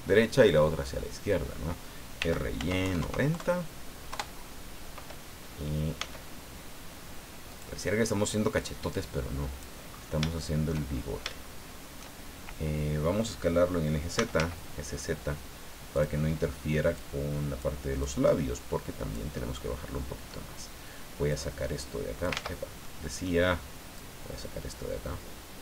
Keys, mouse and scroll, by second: 2.2 r, 2.6 y, 2.8 KP_9, 3.0 KP_0, 4.1 KP_Enter, 6.0 s, 7.5 click, 8.6-9.8 drag, 9.9-10.2 scroll up 3, 10.3 shift+middle click, 11.2 shift+scroll up 3, 11.4 shift+middle click, 13.9-14.9 typing, 15.9 click, 16.9 click, 18.0-19.3 drag, 19.4-20.4 middle drag, 21.3-22.4 drag, 22.4 ctrl+z, 22.8 ctrl+middle click, 24.0-25.6 drag.